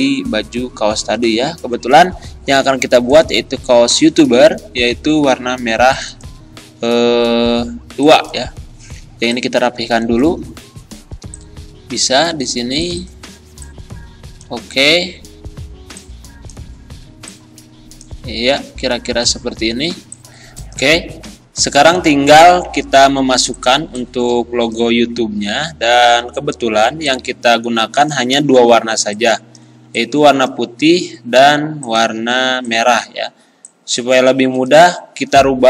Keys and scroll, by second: 29.8 z.